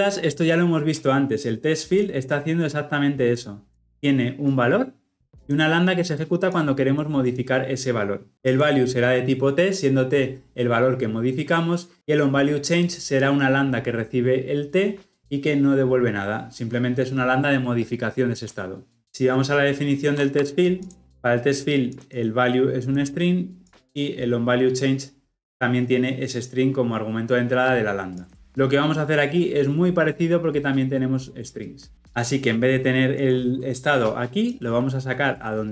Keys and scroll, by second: 21.1 ctrl+b, 28.3 ctrl+alt+Left, 29.3 ctrl+alt+Left.